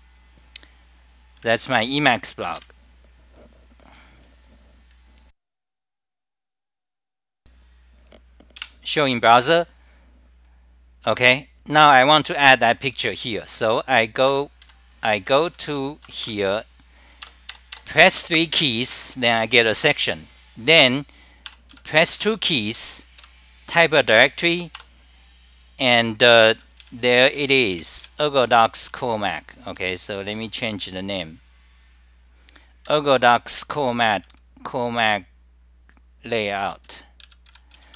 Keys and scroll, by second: 2.7 super+=, 8.6 super+r, 14.5-15.7 typing, 21.9 m, 24.4 Return, 24.8 Return, 26.3-30.4 typing, 32.8 ctrl+g, 33.5 l, 33.9 u, 37.9 Home.